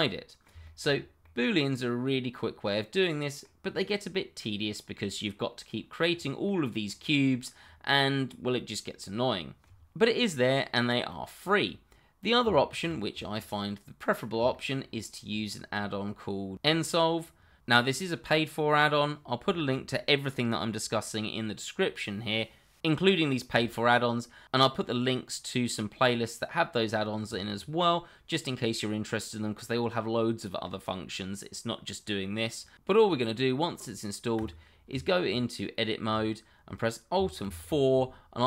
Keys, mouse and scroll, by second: 0.7 shift+middle click, 0.9-1.2 scroll up 1, 1.2 middle click, 2.4 middle click, 3.6-4.1 scroll down 1, 4.1 middle click, 7.6 scroll up 1, 8.3 middle click, 10.2 middle click, 13.2 shift+middle click, 13.4 scroll down 1, 13.6 middle click, 14.6 shift+middle click, 34.3 click, 34.9 Tab, 37.4 alt+4.